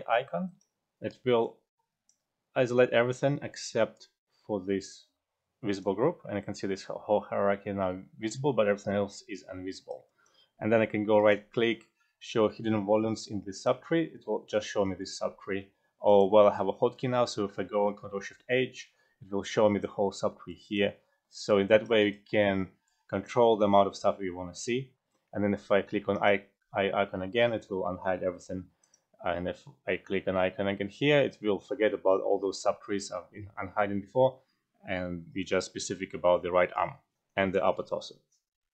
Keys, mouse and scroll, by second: 0.4 alt+click, 1.6-2.3 alt+drag, 3.9-11.1 alt+drag, 9.6 F12, 10.0 alt+right click, 11.1 alt+right click, 13.5 alt+click, 16.0 click, 18.1 ctrl+shift+h, 21.0 alt+middle click, 21.4-22.8 alt+drag, 21.9 alt+right click, 22.4 alt+middle click, 22.8-28.8 alt+drag, 28.8-31.4 alt+drag.